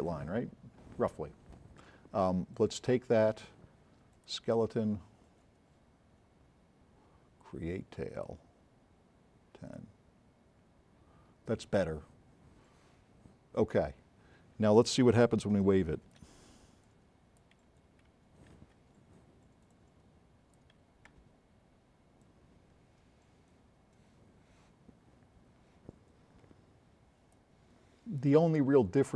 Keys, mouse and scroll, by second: 2.6 click, 8.2 click, 9.7 click, 14.4 scroll up 2, 15.6 s, 19.8 click, 21.1 c, 22.2-23.3 drag.